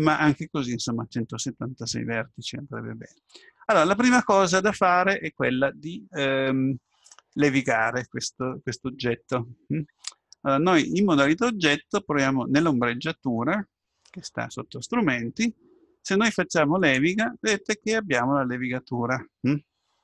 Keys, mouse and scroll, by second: 16.8-18.9 drag, 18.9-20.0 middle drag.